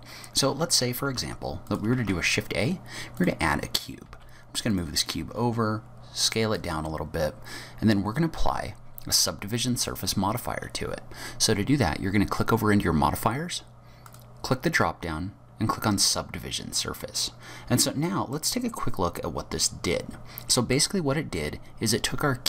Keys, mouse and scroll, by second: 1.7 click, 2.0 shift+a, 4.1 g, 5.2 s, 6.8 scroll down 3, 7.1-8.2 scroll up 7, 9.9 click, 14.1 click, 16.8-18.7 scroll up 19, 18.3 middle click.